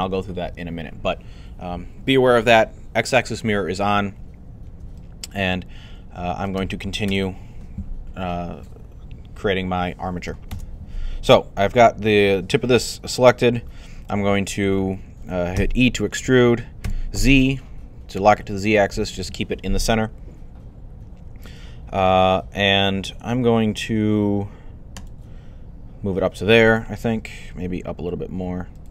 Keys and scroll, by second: 6.9 1, 15.4 e, 16.7 z, 27.2-28.0 typing.